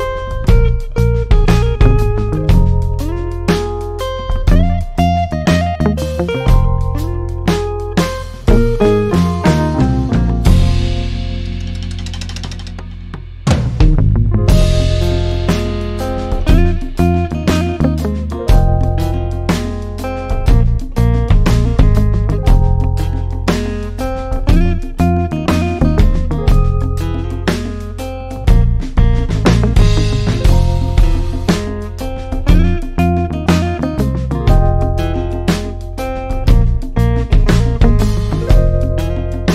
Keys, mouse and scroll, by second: 1.2 click, 12.9-13.7 alt+scroll up 1, 15.7-17.0 drag, 17.0 ctrl+z, 17.9-21.4 drag, 21.4 middle click, 22.3-23.7 scroll up 1, 23.7-24.6 ctrl+scroll down 1, 24.7-26.1 scroll up 1, 26.1-28.6 drag, 28.6-29.6 scroll up 1, 29.6-39.5 drag.